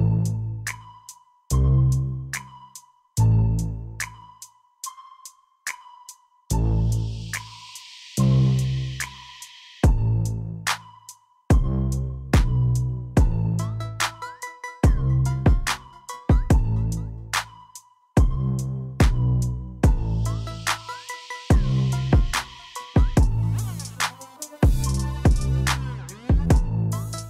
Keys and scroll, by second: 6.5 q, 8.0 alt+a, 18.4 shift+a, 21.1 g, 22.9 Tab, 23.9 s.